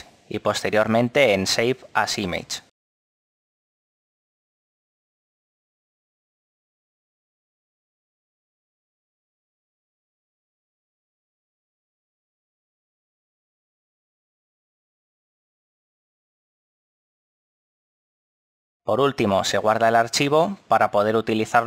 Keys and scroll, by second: 20.5 Escape.